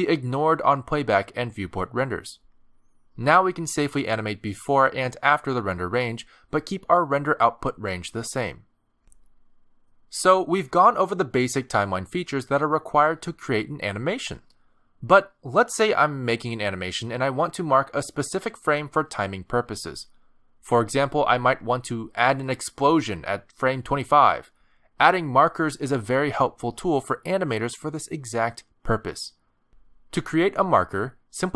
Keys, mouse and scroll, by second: 2.5 space, 19.1 space, 20.3 click, 21.2 click, 22.5 click, 24.3 click, 26.7 click, 30.0 middle click.